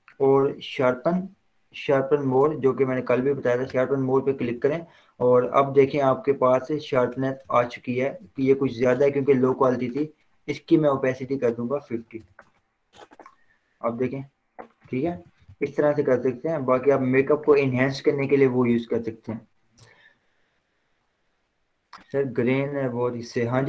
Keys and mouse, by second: 3.9 click, 5.0 z, 5.7-7.4 drag, 8.4 v, 9.8-11.5 drag, 12.4 5, 12.7 Return, 13.9 click, 15.2 ctrl+0, 17.2 click.